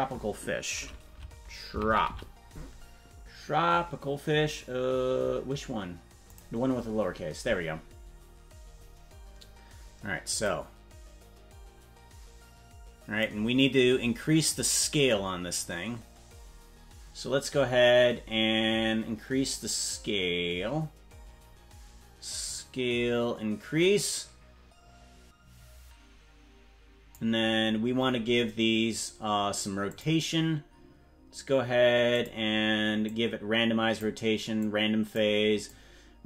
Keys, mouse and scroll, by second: 10.5-13.3 drag, 15.5-16.1 scroll up 4, 22.5-27.2 drag, 29.9 click, 32.1 click, 33.0 click, 34.6 click, 35.6 click.